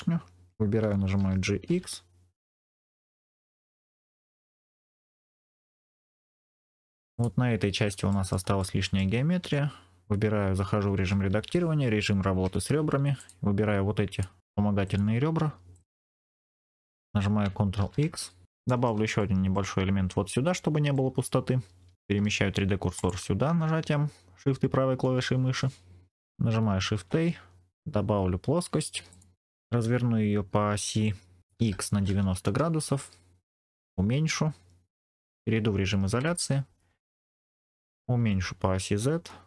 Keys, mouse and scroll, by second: 1.1 g, 1.6 x, 3.1 click, 3.6 click, 3.7 scroll down 2, 3.9-6.2 middle drag, 6.4 scroll down 2, 6.6 middle click, 7.0 click, 7.5-7.9 scroll up 1, 8.0 shift+middle click, 8.5 middle click, 9.3 Tab, 12.3 2, 13.1 click, 14.0 shift+click, 14.7 shift+click, 15.6 shift+click, 16.0 shift+click, 16.3 shift+click, 16.6 shift+click, 17.7 ctrl+x, 18.4 Tab, 18.4 scroll down 3, 18.6 shift+middle click, 19.1 middle click, 20.8 middle click, 22.9-26.0 shift+right drag, 26.0 middle click, 26.8 shift+a, 29.7 r, 31.5 x, 31.8 KP_9, 32.0 KP_0, 32.3 KP_Enter, 33.7 s, 34.8 click, 36.1 KP_Divide, 36.8-37.5 scroll down 2, 37.5 middle click, 38.1 s, 38.8 z.